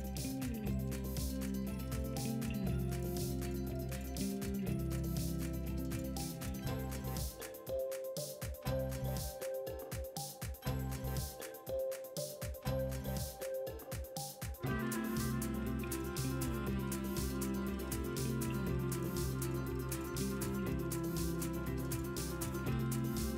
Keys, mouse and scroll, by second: 7.2 g.